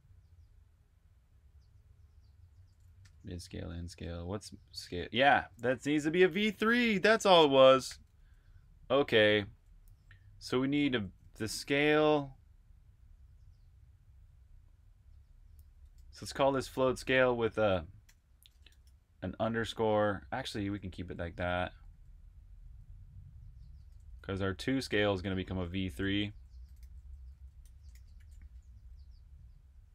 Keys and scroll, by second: 2.5-4.7 typing, 6.9 super+], 7.3-8.3 typing, 9.4 typing, 10.6-11.6 typing, 13.7-14.6 typing, 16.4-18.7 typing, 20.0-24.4 typing, 26.6 typing, 28.5 typing.